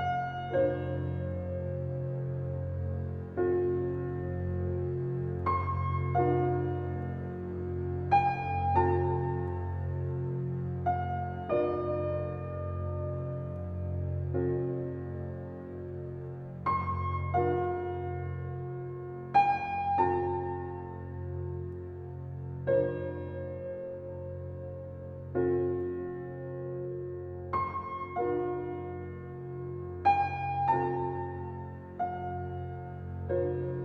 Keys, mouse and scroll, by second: 0.0-1.9 scroll down 1, 4.1 click, 9.2 click, 12.4-13.1 scroll up 1, 16.4 click, 31.6 click.